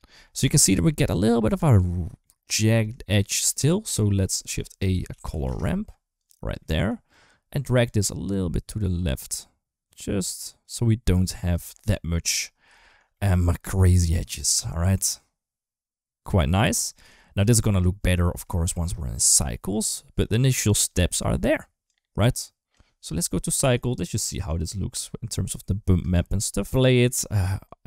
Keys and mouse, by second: 0.0 middle click, 0.5 shift+middle click, 1.4 middle click, 1.7 shift+middle click, 2.4 middle click, 2.8 shift+middle click, 3.9 middle click, 4.2 shift+a, 5.2 r, 6.4 middle click, 7.7-11.3 drag, 11.6 middle click, 12.5 shift+middle click, 12.9 middle click, 13.2 shift+middle click, 14.2 middle click, 14.9-16.8 drag, 17.2 click, 17.9 middle click, 18.4 shift+middle click, 18.8 middle click, 19.1 shift+middle click, 19.6 middle click, 21.6 click, 24.2 click, 25.8 space.